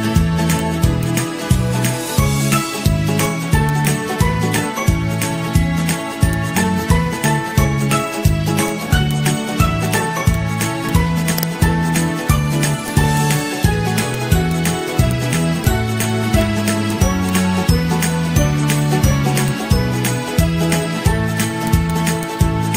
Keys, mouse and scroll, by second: 1.7 ctrl+-, 1.9 ctrl+-, 3.0 Delete, 3.3 Delete, 4.6-8.1 typing, 15.8 z, 16.5 z, 16.6 z, 18.1 ctrl+shift+[, 18.5 ctrl+], 18.8 ctrl+], 18.9 ctrl+], 19.8 ctrl+z, 20.0 ctrl+z, 20.1 ctrl+z, 20.3 ctrl+z, 20.6 ctrl+z, 22.7 ctrl+[.